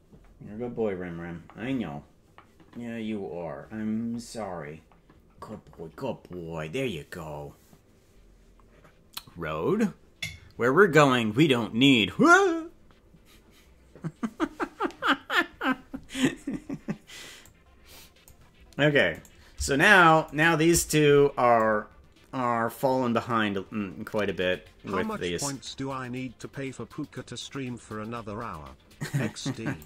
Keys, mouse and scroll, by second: 17.4 click, 19.2 right click, 20.4 shift+right click, 21.6-29.8 drag.